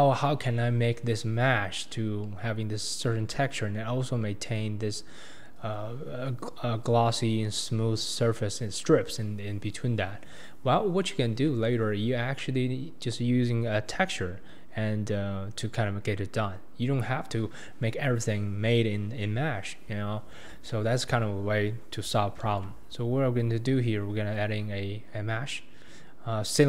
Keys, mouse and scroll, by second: 11.3-11.6 scroll down 1, 11.6-14.8 shift+middle drag, 20.3-20.7 scroll down 1, 20.7-22.5 shift+middle drag, 22.5 shift+a.